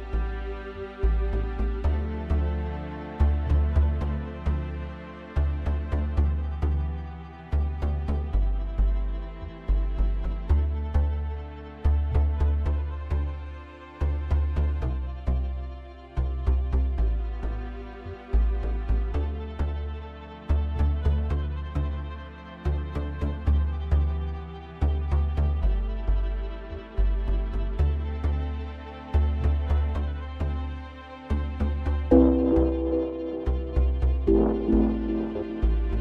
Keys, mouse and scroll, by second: 1.1-3.0 drag, 3.0 middle click, 3.7 Tab, 4.0-4.5 scroll up 1, 4.5 shift+middle click, 5.1-6.1 scroll up 1, 6.1 ctrl+r, 10.7 click, 11.9 alt+middle click, 12.9 shift+click, 13.3 scroll up 1, 13.3 middle click, 14.0-15.6 scroll down 3, 19.4 z, 21.7-22.2 scroll up 2, 22.2 middle click, 23.1 Tab, 23.4-24.2 scroll up 2, 24.2-24.8 scroll down 2, 24.8 Tab, 27.3 Tab, 28.0-28.5 scroll down 3, 28.5 scroll up 1, 28.5-29.1 middle drag, 29.1-29.9 scroll down 1, 29.9-30.3 scroll up 3, 30.3-30.8 shift+middle drag, 30.8-31.2 scroll up 1, 31.2-32.0 middle drag, 32.0 scroll up 1, 32.0-32.7 shift+middle drag, 32.7 scroll up 1, 32.8-34.3 middle drag, 34.3-34.8 scroll down 2, 34.8 scroll up 1, 35.0-35.5 shift+middle drag, 35.5 click.